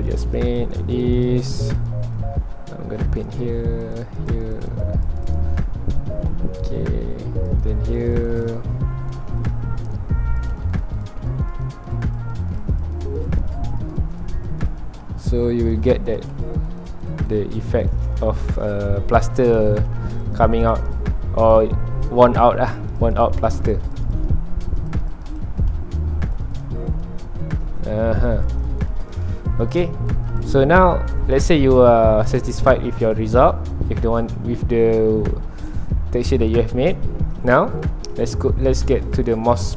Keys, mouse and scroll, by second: 2.1-3.1 middle drag, 3.1-5.6 drag, 5.6 middle click, 6.6-7.0 scroll down 2, 7.0 middle click, 7.5-9.3 drag, 9.3-10.5 shift+middle drag, 10.5-15.0 drag, 15.0 middle click, 15.5 scroll up 1, 15.9-18.3 drag, 18.3 shift+middle click, 18.7-21.5 ctrl+alt+drag, 21.5 middle click, 21.8 scroll up 1, 22.8-27.6 ctrl+alt+drag, 27.6 scroll down 2, 27.7 middle click, 28.5-31.2 drag, 31.2 scroll down 2, 31.2-32.5 middle drag, 32.5-33.3 scroll up 2, 33.3-34.4 ctrl+alt+drag, 34.4 scroll down 2, 34.4-36.4 middle drag, 36.4 click, 36.8 middle click, 37.6 scroll up 1, 37.8 middle click, 38.7-39.7 drag.